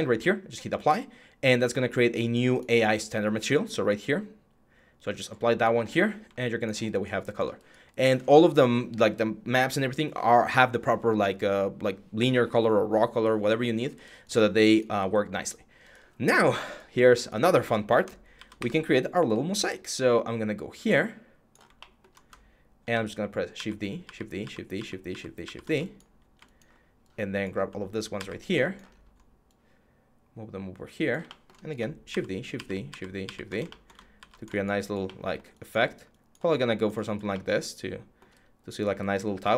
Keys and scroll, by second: 5.5 6, 18.1 ctrl+d, 18.3 w, 23.3-24.9 typing, 27.9 ctrl+d, 31.9-34.0 typing.